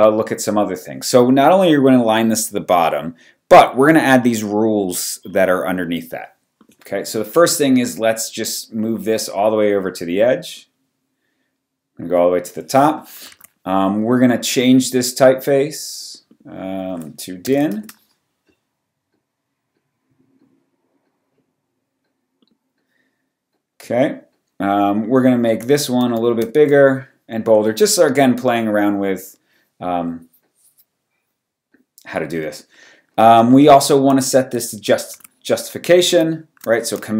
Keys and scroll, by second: 12.9 t, 13.3 super+a, 17.2-18.0 typing, 26.0 shift+super+., 35.1 super+a.